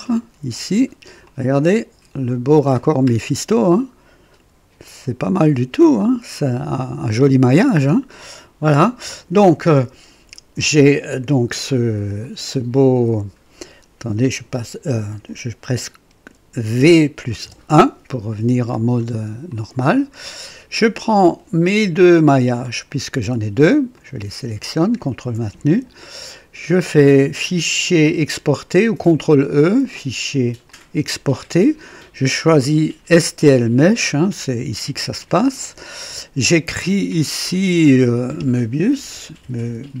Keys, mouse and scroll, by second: 0.0 click, 0.4-1.3 typing, 1.3-2.9 drag, 3.1 scroll up 1, 3.5-8.4 drag, 8.3-9.0 typing, 11.8 typing, 12.2 click, 12.9 typing, 16.8-17.4 typing, 18.8 scroll down 2, 19.5-20.3 drag, 22.9 click, 24.0 click, 25.0 ctrl+click, 29.4 click, 30.6 click, 33.9 click, 35.2 click, 37.5 click, 38.7-40.0 typing.